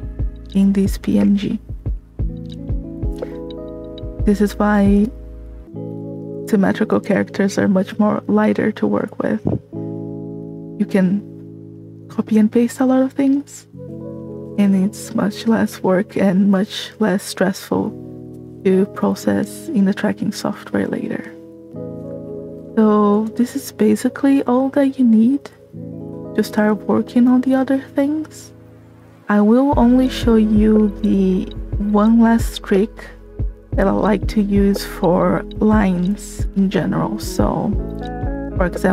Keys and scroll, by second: 8.1 space, 13.8 space, 22.3 space, 35.7 space.